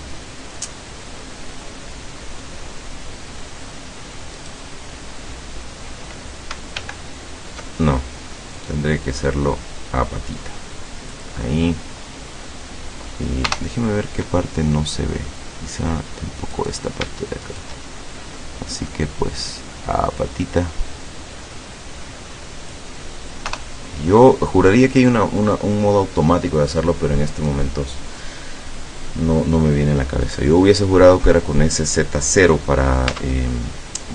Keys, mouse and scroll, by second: 1.3-3.6 middle drag, 4.4 right click, 6.8 alt+g, 8.6-13.3 drag, 11.4-13.3 right drag, 13.5 KP_0, 15.4 middle click, 16.6 right click, 17.5 shift+right click, 18.4 middle click, 19.6-23.0 drag, 23.6 KP_0, 33.2 Tab.